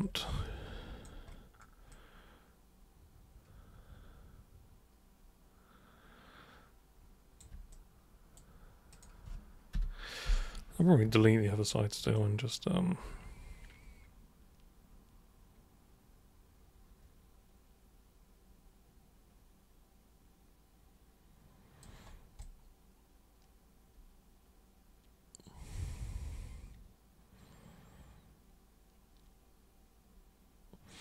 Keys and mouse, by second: 0.3 alt+super+click, 1.8-7.4 alt+super+drag, 7.7 super+right click, 8.9 super+click, 12.1-21.7 alt+super+drag, 22.4-31.0 alt+super+drag.